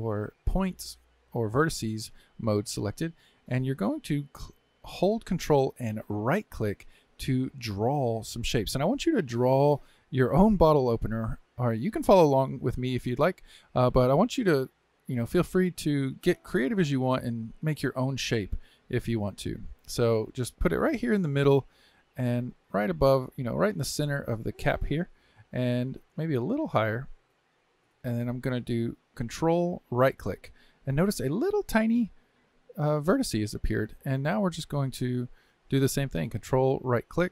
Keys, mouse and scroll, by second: 29.9-32.9 ctrl+right drag, 36.7-37.3 ctrl+right drag.